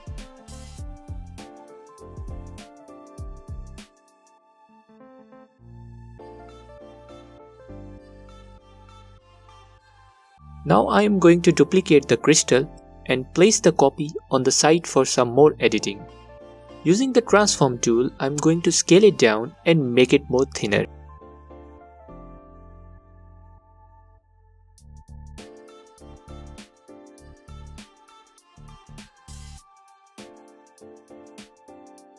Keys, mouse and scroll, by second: 10.3-15.4 alt+drag, 12.6 shift+d, 16.2-32.1 alt+drag, 18.8 space.